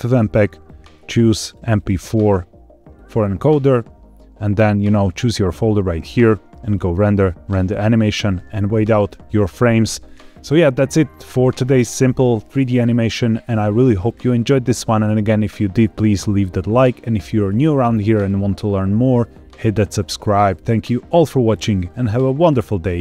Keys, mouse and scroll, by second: 0.4 click, 0.9-1.4 scroll down 2, 1.3 click, 1.7-3.1 drag, 6.6-7.7 drag.